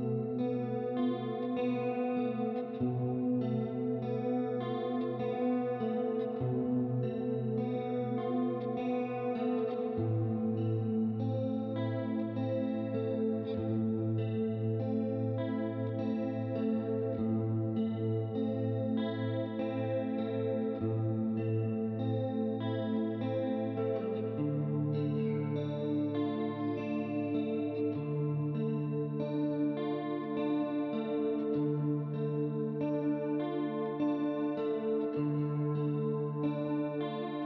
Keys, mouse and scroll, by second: 0.1 click, 1.2 click, 2.4 click, 3.4 click, 4.3 click, 5.5 click, 6.5 middle click, 7.1 right click, 8.1 click, 8.4 middle click, 10.0 click, 14.8 click, 15.9 click, 16.8 middle click, 17.4 click, 20.1 click, 20.9 click, 21.8 right click, 22.8 middle click, 23.3 click, 24.3 click, 25.7 click, 28.7 click, 30.7 click, 32.0 click, 32.6 shift+click, 34.1 click, 35.0 right click, 35.5 middle click, 36.0 click, 36.7 click.